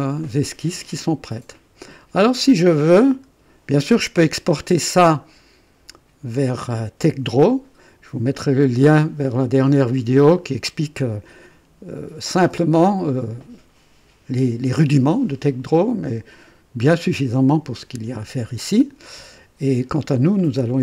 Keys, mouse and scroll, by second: 3.0 right click, 4.2 KP_2.